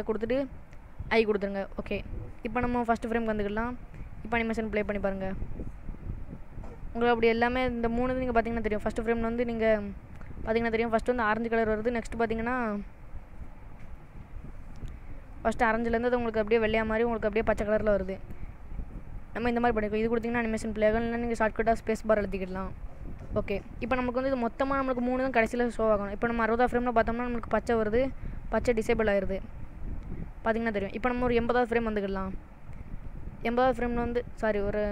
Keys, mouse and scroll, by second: 1.2 i, 3.2 click, 4.5 click, 8.9 click, 11.8 click, 12.8 click, 15.7 space, 19.1 space, 22.2 click, 26.8 click, 27.4 click.